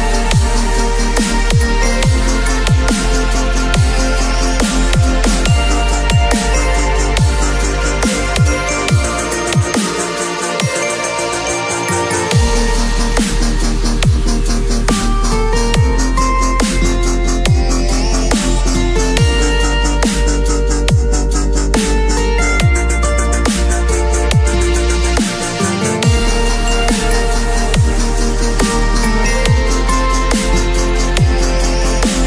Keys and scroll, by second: 0.4 v, 0.9 space, 2.2 l, 6.1 ctrl+c, 6.6 ctrl+w, 6.9 v, 7.5 ctrl+v, 7.9 ctrl+t, 17.5 space, 19.7-21.8 typing, 27.3 5, 27.9 ].